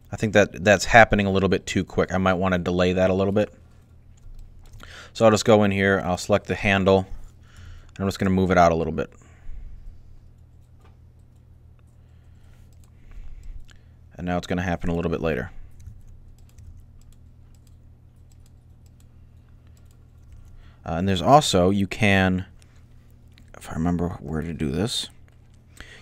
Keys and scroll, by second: 7.3 g, 15.0 alt+a, 15.6 alt+a, 16.4 alt+a, 20.1 alt+a.